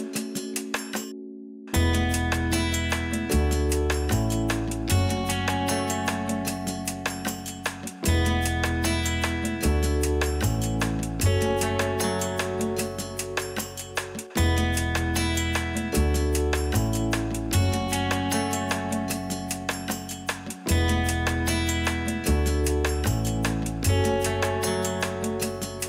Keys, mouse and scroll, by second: 0.1 x, 3.0-7.2 drag, 6.9-7.2 scroll down 2, 7.2-9.0 middle drag, 9.0-9.5 drag, 9.5-17.0 middle drag, 10.0-10.4 scroll up 2, 11.1 KP_3, 12.7 ctrl+r, 17.1-18.7 drag, 18.7 ctrl+r, 22.1-23.4 drag, 23.5 scroll up 1, 23.9-24.7 scroll down 1.